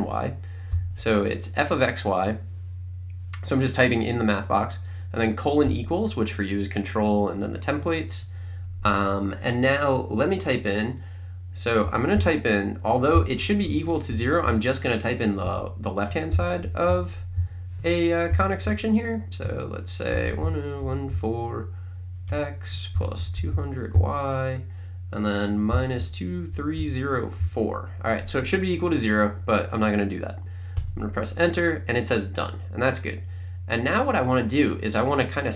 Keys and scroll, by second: 0.8 =, 11.7-14.9 typing, 15.5 Right, 16.4-18.6 typing, 19.4 Right, 19.9-23.9 typing, 25.5-27.4 typing, 30.8 Return.